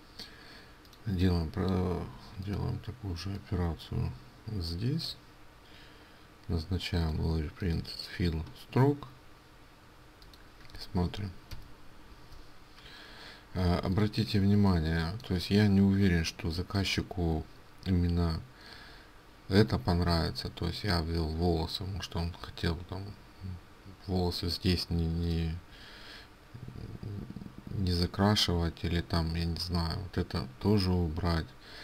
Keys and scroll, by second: 13.8 ctrl+space.